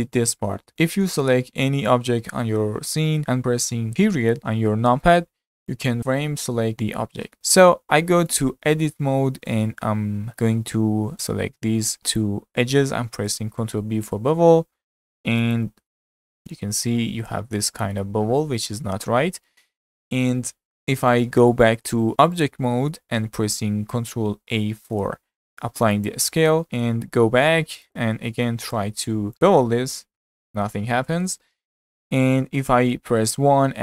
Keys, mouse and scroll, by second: 5.4 KP_Decimal, 7.5-8.8 middle drag, 8.8 Tab, 9.5-11.2 middle drag, 11.2 click, 12.1 shift+click, 13.6 ctrl+b, 16.1-19.2 middle drag, 19.9 ctrl+z, 20.6 Escape, 21.1 middle click, 22.0 Tab, 22.4-24.4 middle drag, 24.4 ctrl+a, 26.8 Tab, 27.8 shift+click, 28.7 click, 29.7 ctrl+b, 31.6-33.4 middle drag, 33.4 1.